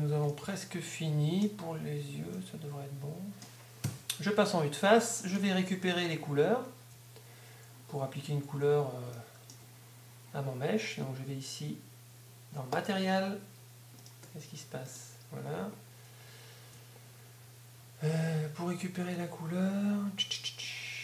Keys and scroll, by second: 6.9 Tab, 17.8 Tab, 20.3 z.